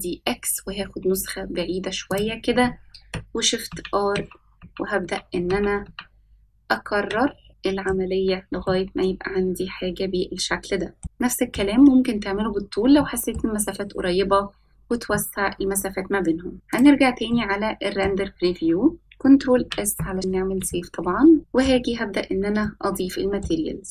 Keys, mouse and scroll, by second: 5.1-6.9 typing, 7.7-9.3 middle drag, 9.7-10.1 scroll down 1, 10.1-13.0 middle drag, 11.0 s, 14.4-14.8 middle drag, 16.5-17.3 middle drag, 18.2 click, 18.8-19.6 middle drag, 21.4 ctrl+s, 21.4-22.2 shift+middle drag, 21.4 scroll down 1, 23.0-23.3 shift+middle drag, 23.5-23.9 scroll down 1.